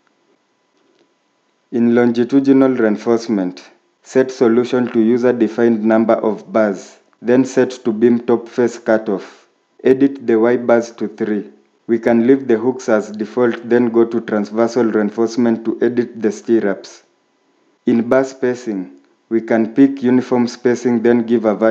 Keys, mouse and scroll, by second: 10.6 3, 20.8-21.5 typing.